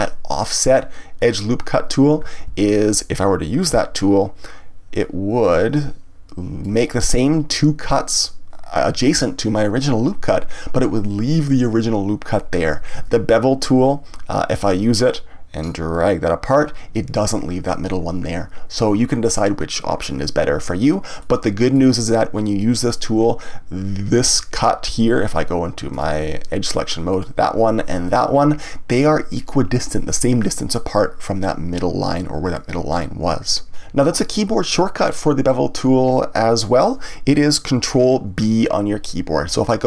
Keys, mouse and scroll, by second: 2.5 ctrl+z, 3.9-6.9 drag, 12.9 ctrl+z, 14.5 click, 15.6 click, 21.2-24.2 middle drag, 25.9-27.2 drag, 28.0 alt+click.